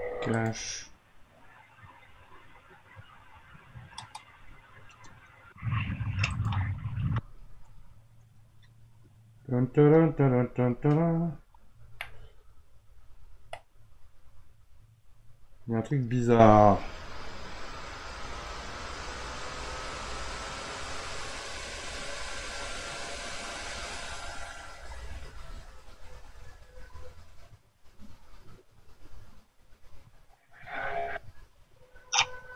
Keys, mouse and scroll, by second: 9.1-10.1 scroll down 4, 10.1-12.0 scroll down 8, 12.0-16.9 middle drag, 16.9-20.6 scroll down 4, 29.4 scroll down 3, 30.7-31.4 scroll down 2, 31.8-32.5 scroll down 1.